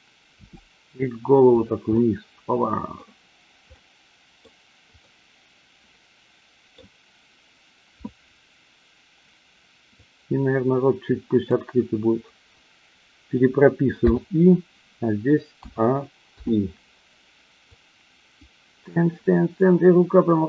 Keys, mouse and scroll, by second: 0.4 r, 1.5 click, 1.9-3.0 middle drag, 3.8-4.4 middle drag, 5.0-6.8 middle drag, 10.0-11.4 drag, 14.0 i, 15.5 a, 16.3 i, 17.6-20.4 drag.